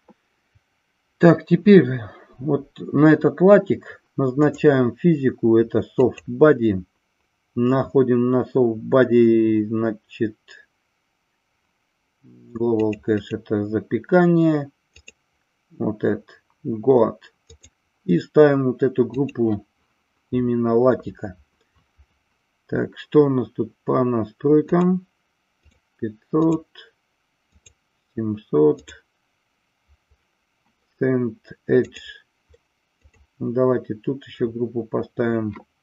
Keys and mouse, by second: 4.5 click, 6.1 click, 17.5-19.2 drag, 24.6 click, 25.5 click, 26.4 click, 27.4 click, 28.6 click, 31.8-33.1 drag.